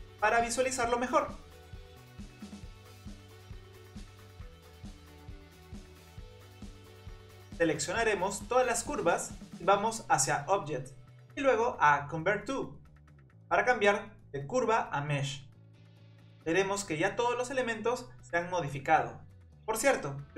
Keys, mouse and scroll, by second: 0.4-1.8 shift+middle drag, 1.8-3.0 scroll up 4, 3.0 click, 6.1 scroll up 2, 6.3-6.7 shift+middle drag, 6.9 click, 7.2 click, 7.4-8.0 scroll down 5, 8.0 click, 8.3 scroll up 3, 8.5 click, 8.7 scroll down 5, 9.0 shift+click, 10.8-16.7 drag, 16.9-17.7 scroll up 5, 17.7 click, 18.6-19.6 scroll down 2, 19.6-20.3 middle drag.